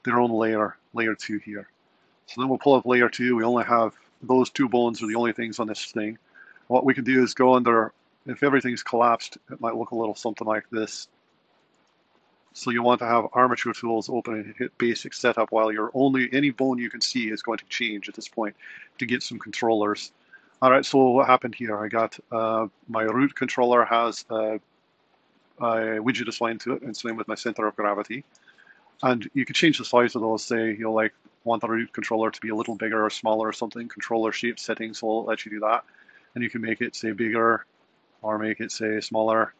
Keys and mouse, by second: 2.9 click, 4.8 a, 8.3 click, 9.4 click, 10.5 click, 11.8 click, 13.3 click, 14.8-16.0 drag, 21.5 click, 26.3 click, 27.5 r, 30.0 click, 30.7 click, 33.8 click, 36.6-39.3 drag, 36.6 typing, 38.2-39.0 typing, 39.4-39.5 drag.